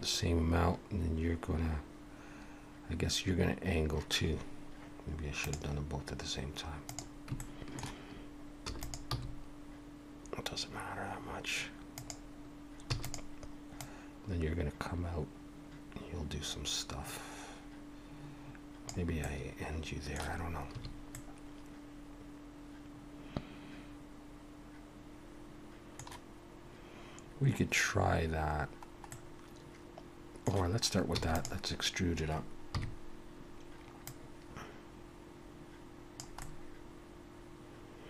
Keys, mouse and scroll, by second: 6.9 click, 7.4 shift+middle click, 8.6 e, 9.1 g, 12.9 e, 13.8 click, 19.2 middle click, 20.7 a, 21.1 middle click, 29.1 middle click, 31.1 e, 32.7 KP_3, 34.0 click, 36.4 middle click.